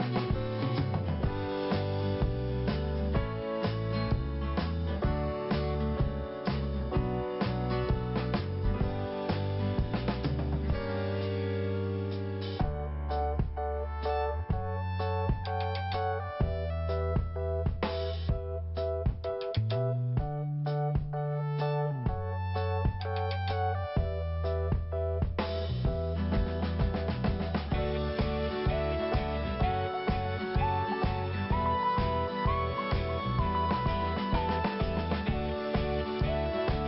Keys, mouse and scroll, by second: 0.6 scroll up 1, 1.5 click, 1.6 click, 2.2 click, 2.3 click, 3.2 click, 8.4 click, 8.5 click, 11.5 click, 11.7 click, 12.4 scroll down 1, 13.2 click, 16.0 scroll up 2, 17.4 click, 18.2 click, 18.2 click, 18.8-19.1 scroll down 2, 20.7 scroll up 1, 21.6 click, 21.6 click, 22.7 click, 24.3 scroll down 1, 25.8 scroll up 1, 26.9 click, 27.0 click, 27.3 scroll up 2, 28.1 click, 29.2 scroll down 1, 30.4 click, 33.2 scroll up 1, 34.3 click, 34.3 click, 36.0 click.